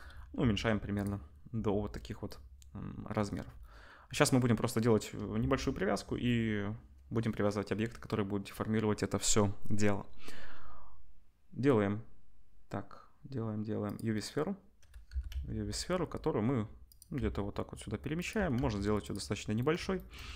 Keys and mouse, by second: 0.4 s, 5.3 shift+a, 13.9-15.1 drag, 15.1 g, 17.2 s, 18.3 g, 19.7-20.1 shift+middle drag, 20.1-20.3 drag.